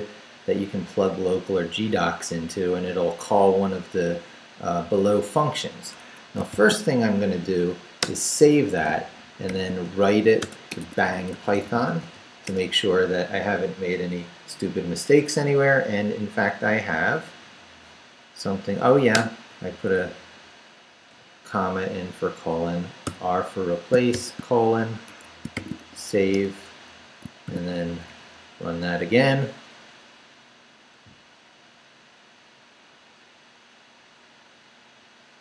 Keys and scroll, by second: 6.0 Escape, 6.5 shift+;, 7.3 shift+w, 8.0 Return, 8.9 shift+Return, 9.5-12.5 typing, 19.2 Return, 19.9 Left, 20.6 Left, 21.1 Left, 23.0-26.3 typing, 25.1 shift+Escape, 26.3 Return, 27.2 shift+Return, 27.6 shift+;, 27.9 shift+Up, 28.7 Return.